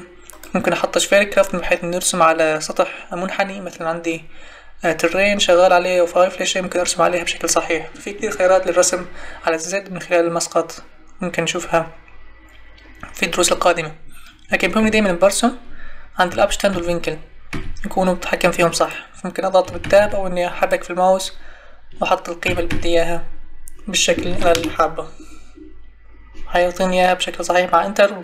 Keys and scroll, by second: 14.5 Escape, 16.3 Tab, 19.6 Tab, 22.4 2, 24.3 4, 24.5 Return.